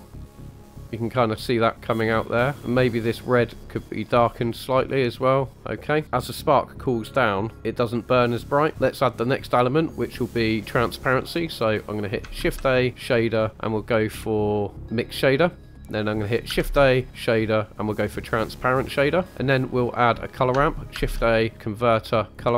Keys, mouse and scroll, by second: 0.2 drag, 0.6 click, 0.8 middle click, 0.8-1.3 scroll up 1, 2.0 click, 2.9-3.5 drag, 3.9 click, 6.0 click, 8.7 middle click, 8.7-9.1 scroll down 2, 12.7 shift+a, 16.6 shift+a, 19.3 middle click, 21.0 shift+a.